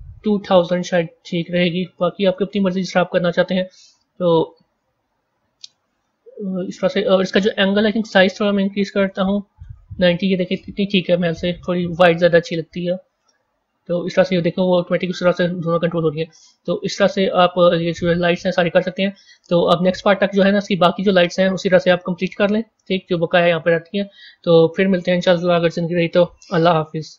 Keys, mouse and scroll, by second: 0.0-0.7 typing, 2.3-5.3 middle drag, 5.9-7.7 middle drag, 7.7-10.7 drag, 11.8-14.8 middle drag, 17.2-18.2 middle drag, 18.2-18.5 middle drag, 18.5-19.9 scroll down 3, 19.9 middle click, 20.6-21.1 scroll down 1, 21.1-24.1 middle drag.